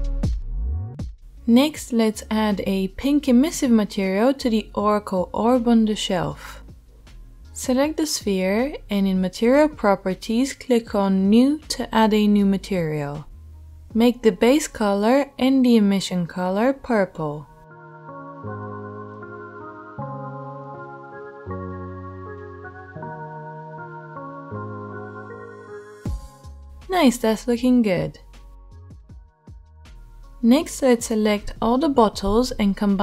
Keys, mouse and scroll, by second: 7.8-9.2 middle drag, 9.2-10.7 right drag, 10.7-11.5 middle drag, 11.5 right click, 11.6-13.4 middle drag, 13.4-24.9 right drag, 24.9-26.2 drag, 26.2-33.0 right drag.